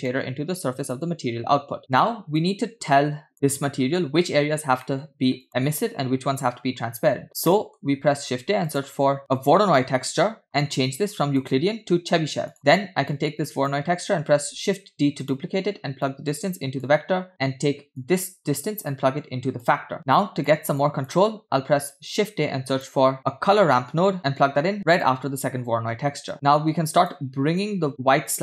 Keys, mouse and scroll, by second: 0.1-1.2 drag, 2.4 click, 4.0 middle click, 5.2 middle click, 7.1 click, 7.9 middle click, 8.2 shift+a, 10.8-11.3 scroll up 1, 11.4-12.5 drag, 12.5 middle click, 12.5 scroll down 2, 13.1 click, 14.5 shift+d, 16.1-16.9 drag, 18.0 click, 19.8 click, 20.0-20.5 drag, 20.9 click, 21.8 shift+a, 26.3 click, 27.6-28.4 drag.